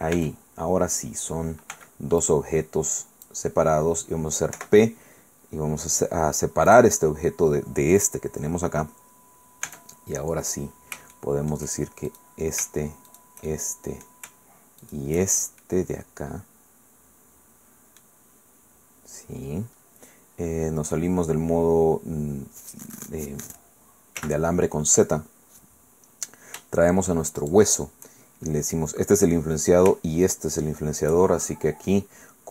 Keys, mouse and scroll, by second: 0.1 Tab, 1.7 b, 2.2-3.4 drag, 4.5 p, 6.7 click, 7.9 right click, 9.6 Tab, 11.1 shift+click, 12.1 shift+middle click, 13.1 shift+right click, 13.5 shift+right click, 14.8 shift+right click, 15.2-15.6 shift+scroll down 1, 15.6 shift+middle click, 15.7-18.2 right drag, 24.2 z, 25.3-25.6 scroll up 2, 25.6-26.6 scroll down 2, 27.4 shift+click, 30.2 shift+right click.